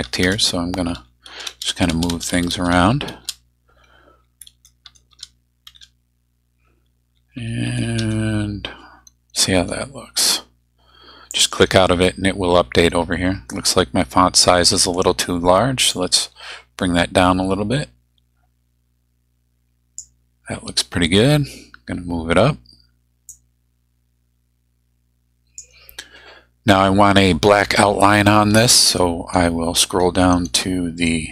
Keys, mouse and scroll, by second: 0.9 Right, 1.3 space, 4.2 Up, 4.5 Left, 5.1 space, 5.8 Down, 7.2 Up, 7.7 Left, 11.3 click, 15.9-20.2 drag, 23.3-25.8 drag, 29.6-30.4 scroll down 4.